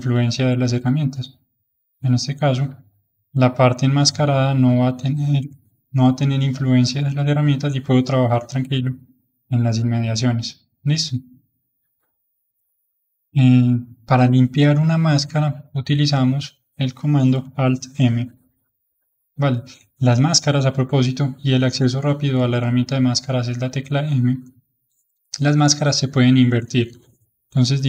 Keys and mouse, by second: 1.6-6.9 drag, 7.1-18.3 middle drag, 18.3 alt+m, 18.8-21.9 middle drag, 23.4 m, 24.7-27.1 drag, 27.1-27.8 middle drag.